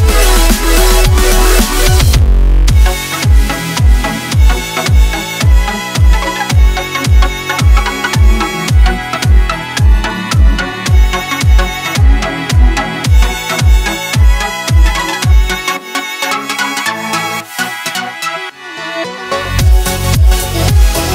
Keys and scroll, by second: 1.3-6.4 typing, 8.6 a, 8.8 shift+Tab, 11.2-14.6 typing, 15.8 z, 17.4-18.3 typing, 19.1 Tab, 20.3 a.